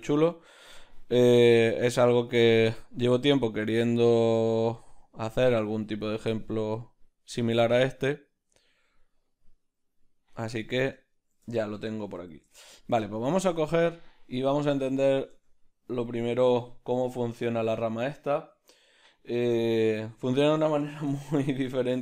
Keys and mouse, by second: 1.8-11.1 drag, 11.1-22.0 ctrl+middle drag, 16.2 b.